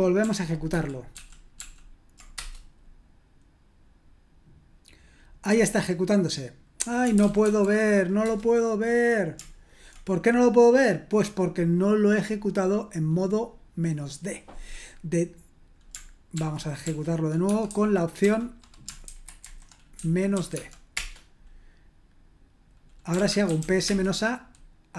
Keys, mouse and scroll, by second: 0.2 ctrl+p, 0.7 ctrl+p, 1.1 ctrl+p, 1.5 ctrl+p, 2.3 Return, 6.7-7.9 typing, 8.2 Return, 16.3 ctrl+p, 16.8 ctrl+p, 17.4 space, 17.7 -, 19.0 alt+b, 19.4 alt+b, 20.0-20.5 typing, 20.9 Return, 22.9-24.0 typing.